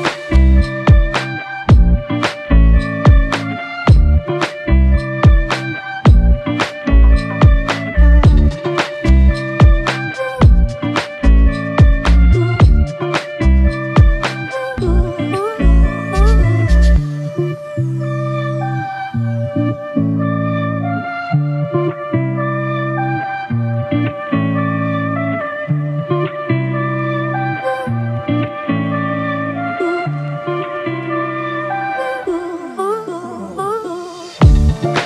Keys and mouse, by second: 1.2 w, 2.6 alt+click, 8.8 ctrl+click, 11.0 ctrl+click, 16.6 ctrl+click, 19.4 alt+click, 24.7 ctrl+click, 29.1 ctrl+click, 30.8 alt+click.